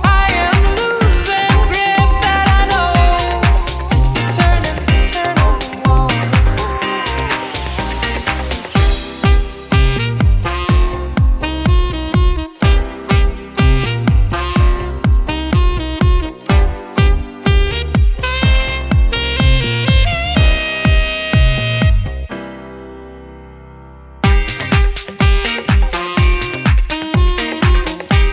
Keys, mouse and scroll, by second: 0.9 click, 6.4 middle click, 7.1 click, 10.1 scroll down 2, 10.3 middle click, 10.9 scroll up 4, 11.2 middle click, 11.9 scroll up 2, 12.1 middle click, 13.0 click, 15.1-16.1 scroll down 8, 15.5 middle click, 16.3 middle click, 16.7 scroll up 5, 16.9 middle click, 17.5 scroll up 2, 17.6 middle click, 18.3 click, 20.1 click, 22.7 scroll down 4, 22.9 middle click, 23.3 scroll down 2, 23.5 middle click, 24.7 click, 25.2 scroll down 2, 25.3 middle click, 25.7 click, 26.5 g, 27.4 scroll down 3, 27.6 middle click, 28.0 scroll up 1.